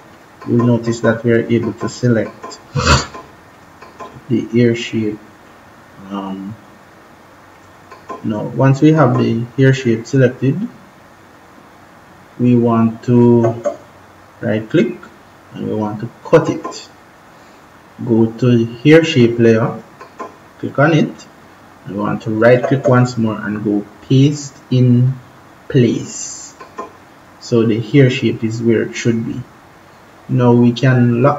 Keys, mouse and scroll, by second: 7.4 click, 12.9 right click, 16.1 click, 19.6 click, 22.3 right click, 26.3 click, 31.1 click.